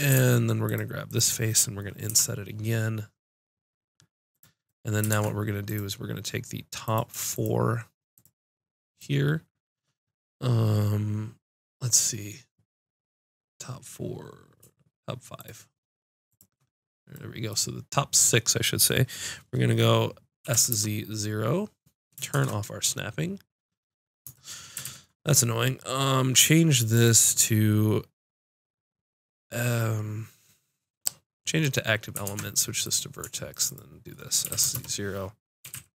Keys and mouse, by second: 1.0 click, 2.1 l, 5.1 ctrl+Tab, 20.4 s, 24.8 ctrl+z, 26.9-32.2 drag, 32.2 ctrl+Tab, 33.5 click, 34.4 s, 34.8 click, 35.6 s.